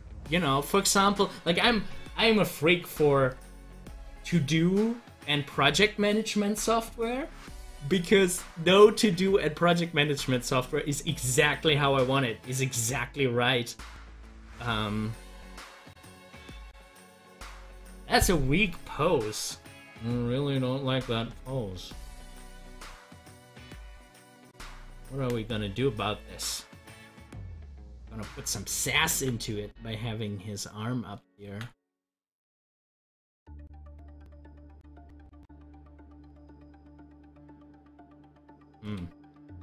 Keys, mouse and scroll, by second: 15.3 click, 15.4 click, 26.8-29.1 drag, 29.1 ctrl+z, 31.5 ctrl+z, 38.6 z.